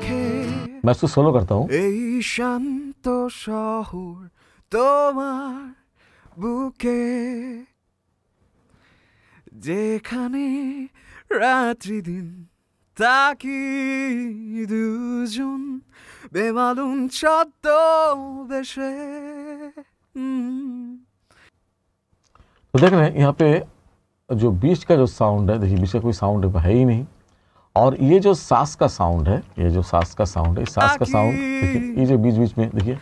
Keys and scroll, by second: 26.0 space, 27.8 space, 30.1 t, 30.7 space, 32.0 space.